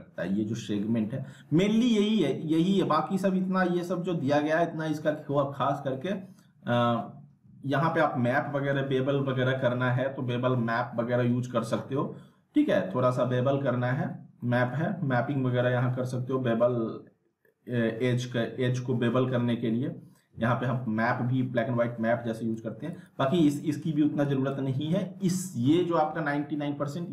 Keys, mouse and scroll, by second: 13.8 middle click, 13.9 scroll down 1, 14.4 middle click, 18.9-20.4 scroll up 1, 22.5-23.7 drag.